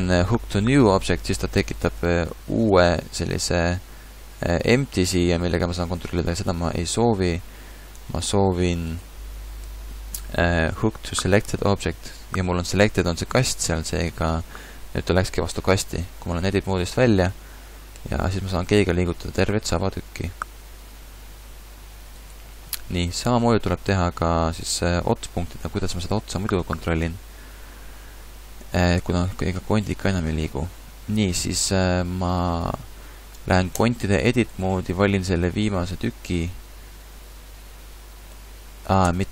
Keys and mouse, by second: 2.6 Tab, 3.5 g, 6.5 ctrl+z, 7.0 ctrl+z, 8.0 Tab, 9.6 ctrl+h, 15.8 Tab, 18.0 g, 19.8-21.6 drag, 20.5 g, 22.9-24.0 middle drag, 24.8 middle click, 25.7 click, 29.0 g, 30.4 middle click, 33.8 Tab, 39.1 Tab.